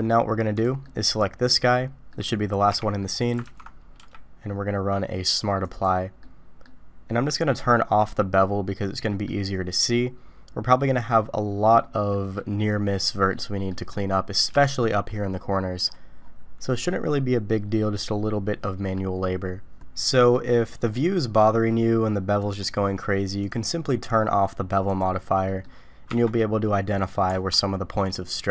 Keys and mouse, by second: 0.8-1.2 middle drag, 2.1 middle click, 2.7 h, 3.0 middle click, 3.5 ctrl+z, 4.0 q, 6.2-6.6 middle drag, 8.4-9.3 middle drag, 12.1 middle click, 13.3-13.7 middle drag, 13.9 middle click, 14.6 shift+middle click, 16.6-19.0 middle drag, 19.8 Tab, 20.3-20.9 drag, 22.4 click, 23.5-25.0 drag, 25.5 click, 26.1 Tab, 26.6 click, 27.3 alt+a, 28.1-28.5 middle drag.